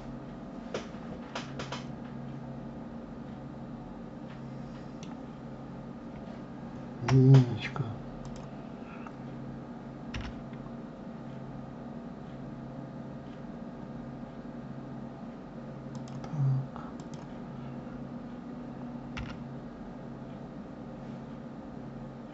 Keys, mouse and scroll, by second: 0.6-3.6 middle drag, 6.9 KP_1, 8.1 click, 10.0 g, 16.8 click, 19.0 g.